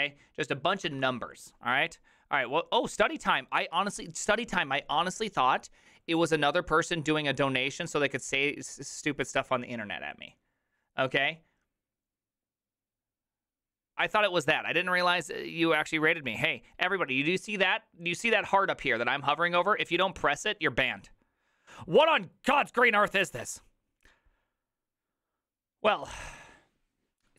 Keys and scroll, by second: 1.0 alt++.